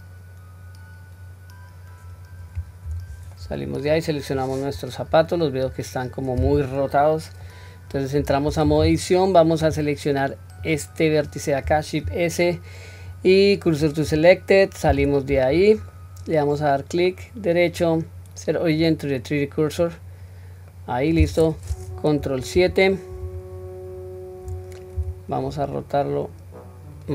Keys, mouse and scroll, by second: 0.5 scroll down 1, 1.5-2.9 scroll up 2, 2.9 Tab, 3.4 middle click, 4.2 click, 5.0-7.4 middle drag, 8.2 Tab, 8.7 middle click, 10.6 click, 12.1 shift+s, 15.0 Tab, 15.6-15.9 scroll down 1, 15.9-16.6 middle drag, 17.1-19.9 right drag, 20.7 middle click, 22.5 ctrl+KP_7, 23.9 scroll up 1, 25.0-25.6 scroll up 1, 25.0 r.